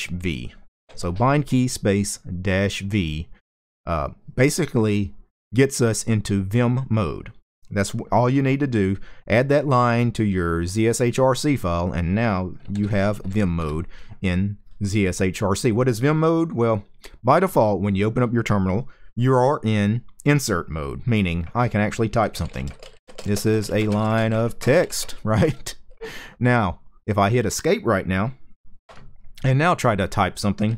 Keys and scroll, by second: 12.4-12.9 typing, 13.3 Return, 21.7-25.1 typing, 28.6 Escape, 30.3-30.7 typing.